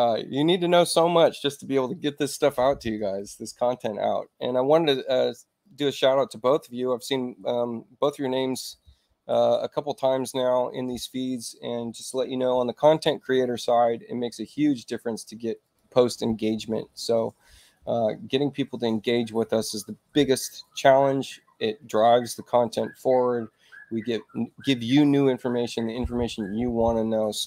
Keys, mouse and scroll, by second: 5.6 click, 10.1 click, 15.6 click.